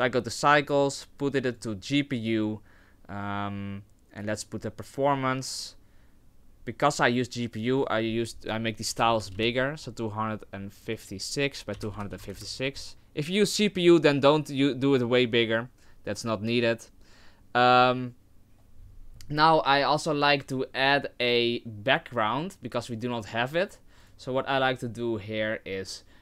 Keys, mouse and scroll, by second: 0.5 click, 4.2 click, 7.8 click, 10.9 click, 23.0 click.